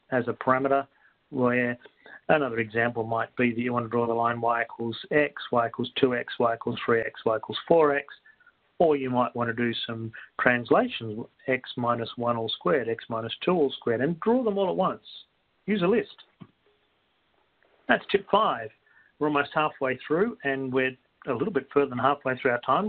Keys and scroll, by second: 0.4-1.1 typing.